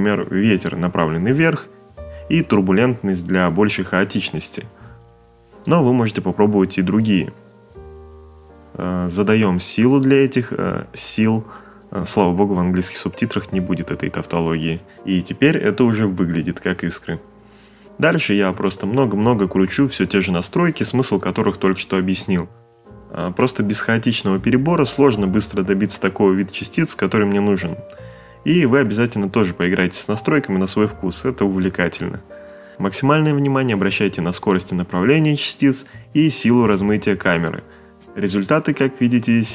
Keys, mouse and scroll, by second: 0.0 click, 2.4 5, 2.5 Return, 5.1 a, 13.8 click, 13.9 click, 17.5 click, 18.5-19.3 typing, 18.5 click, 19.0 middle click, 19.3 click, 19.8 click, 20.0 click, 20.4 click, 20.6 click, 21.1 click, 21.5 click, 21.8 middle click, 21.9 space, 22.3 click, 22.7 Return, 22.8 click, 23.1 click, 23.4 click, 24.2 ctrl+middle click, 24.4 click, 25.1 click, 25.3 shift+middle click, 25.7 click, 26.0 click, 26.8 click, 27.2 click, 27.7 Return, 27.8 click, 29.0 middle click, 29.8 middle click, 29.9 6, 30.0 click, 30.3 middle click, 30.7 middle click, 30.8 click, 31.3 o, 31.4 BackSpace, 31.5 Tab, 31.8 shift+middle click, 31.9 click, 32.1 middle click, 32.3 space, 32.3 middle click, 32.5 click, 32.6 middle click, 32.9 click, 33.3 middle click, 33.9 click, 34.0 click, 34.1 ctrl+middle click, 34.4 click, 34.7 ctrl+middle click, 34.9 space, 35.4 click, 35.7 click, 36.0 click, 36.1 middle click, 36.6 click.